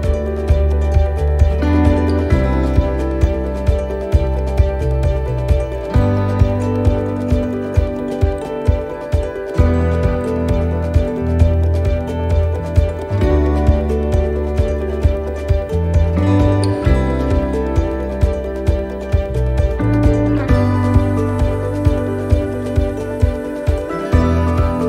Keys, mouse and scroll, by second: 1.0 click, 2.7 scroll down 1, 3.2 middle click, 3.2 scroll down 2, 4.0 click, 5.5 ctrl+z, 6.4 click, 8.4 click, 12.8 click, 14.6 click, 18.0 click, 20.1 shift+middle click, 20.6-21.6 shift+scroll up 5, 21.5 middle click, 22.8 scroll up 2, 23.2 middle click, 23.6 scroll down 2, 24.0 shift+middle click, 24.4 scroll up 2, 24.7 middle click.